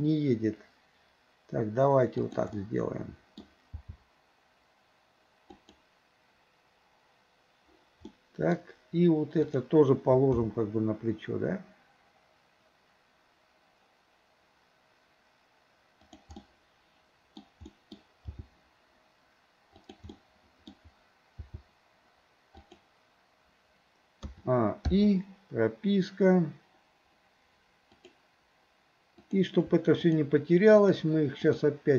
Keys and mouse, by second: 2.6 middle click, 3.8 g, 8.2-8.6 middle drag, 9.5 click, 10.5 g, 16.4-17.5 middle drag, 17.7 middle drag, 18.4 g, 20.2-20.7 middle drag, 21.5 g, 24.3 a, 25.0 i, 28.0 click, 29.2 click, 30.0 shift+click, 31.5 shift+click.